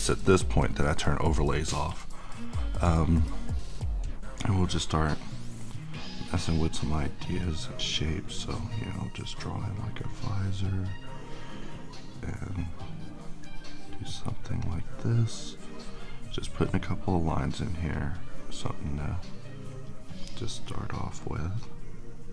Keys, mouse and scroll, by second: 0.6 click, 2.2-5.2 middle drag, 5.2-16.8 drag, 19.3-22.3 drag.